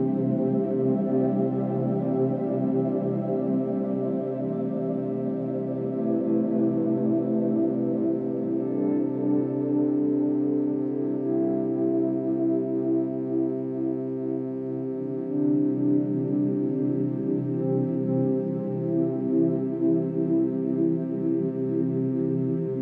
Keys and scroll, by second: 7.4 Delete, 7.6 ctrl+-, 7.7 ctrl+=, 22.3 ctrl+=.